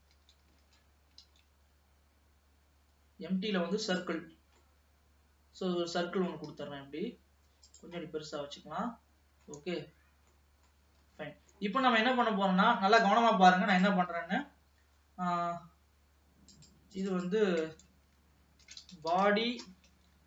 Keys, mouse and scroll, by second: 0.2 alt+a, 0.8 ctrl+s, 1.3 shift+a, 4.7-6.6 middle drag, 6.6 s, 8.1-9.7 middle drag, 9.7 Tab, 10.4 middle click, 11.3 ctrl+s, 11.6-13.1 middle drag, 13.1 ctrl+s, 13.9 click, 16.5 click, 17.0 click, 17.2-20.2 drag.